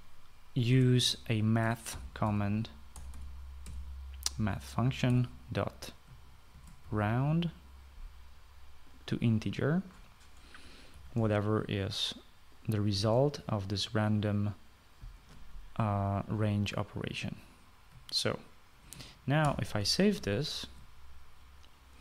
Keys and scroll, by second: 1.5 space, 1.7 Left, 2.7-4.4 typing, 5.9 typing, 7.1-8.2 typing, 11.7 (, 13.7 ), 20.2 ctrl+s.